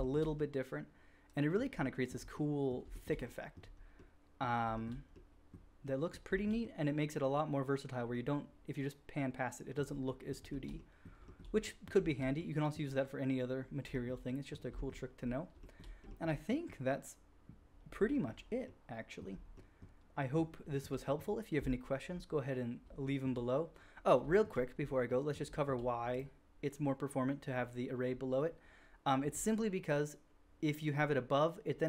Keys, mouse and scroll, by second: 0.3 click, 2.0 click, 2.4-4.2 drag, 4.6 shift+drag, 4.8-15.5 drag, 15.5 shift+middle drag, 15.6 shift+click, 15.7 shift+middle click, 15.9-20.8 shift+drag, 20.8 shift+middle drag, 20.8-25.0 drag, 25.0-25.6 middle drag, 26.1 middle click.